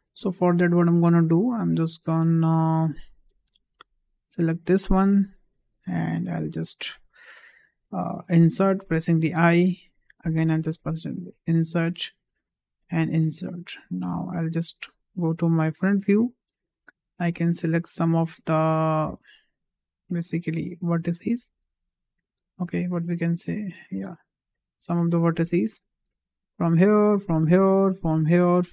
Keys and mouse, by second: 2.6 middle click, 3.6 3, 8.4 i, 10.8 i, 12.4 i, 15.7 click, 16.9 1, 18.0 click, 19.3 middle click, 20.7 click, 21.6 ctrl+z, 23.2-24.2 drag, 25.0 ctrl+click, 26.5 shift+click, 27.5 shift+click, 28.5 shift+click.